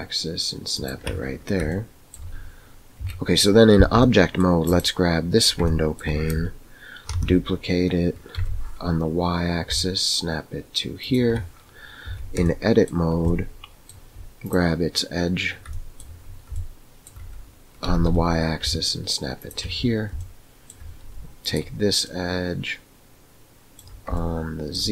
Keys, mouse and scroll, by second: 1.6-2.1 shift+middle drag, 3.0 Tab, 4.0 middle click, 5.7-6.0 shift+middle drag, 7.2 shift+d, 12.0 Tab, 12.6 shift+middle click, 13.5 middle click, 14.4 click, 15.6 shift+middle click, 16.7 shift+middle click, 17.8 g, 20.2 shift+middle click, 22.2-23.8 middle drag, 24.2 shift+middle click.